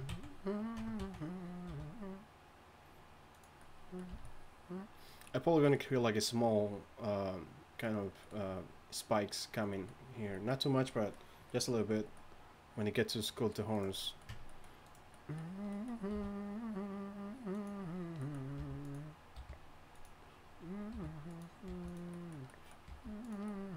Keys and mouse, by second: 0.1 z, 0.8 Tab, 1.0 z, 1.7 r, 4.1 a, 13.7 right click, 14.3 Tab, 16.1 r, 18.6 g, 19.4 r, 19.9 g, 20.9 r, 21.7 g, 22.7 g, 22.9 g.